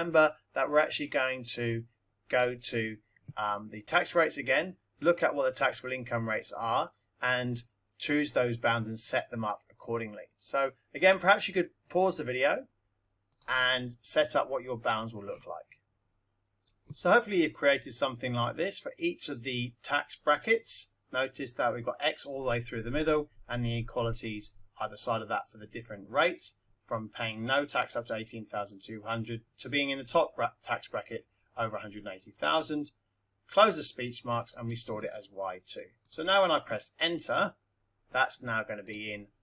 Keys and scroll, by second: 16.6 0, 16.7 Left, 36.0 Return, 38.7 F1.